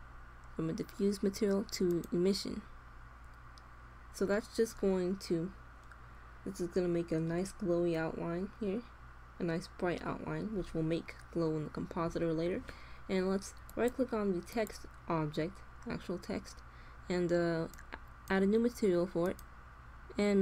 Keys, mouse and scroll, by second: 2.7-6.5 middle drag, 14.0-15.4 drag, 17.6-20.4 drag.